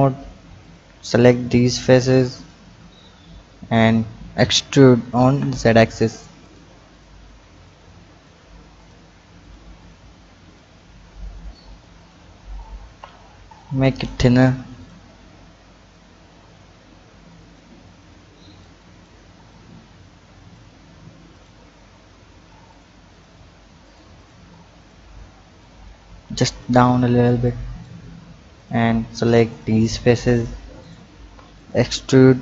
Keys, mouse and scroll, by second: 0.6 shift+click, 1.1 shift+click, 1.7 shift+drag, 2.4 shift+click, 3.5 click, 4.6 e, 6.9 drag, 7.6 click, 8.8 click, 9.4 shift+click, 9.8 shift+click, 10.5 shift+click, 11.0 shift+click, 11.4 shift+click, 12.0 shift+click, 12.5 shift+click, 13.5 click, 14.8 click, 15.9-19.5 drag, 21.3 drag, 22.7 shift+click, 23.1 shift+click, 23.8 shift+drag, 24.1 shift+click, 24.8 shift+click, 25.6-27.5 drag, 28.5 click, 29.5 shift+click, 30.3 shift+click, 30.8 shift+click, 31.5 click.